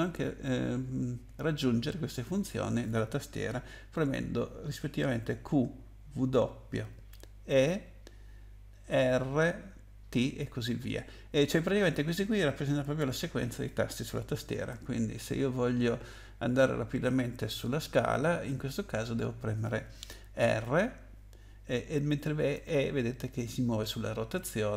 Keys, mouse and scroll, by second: 20.6 r, 22.5 e.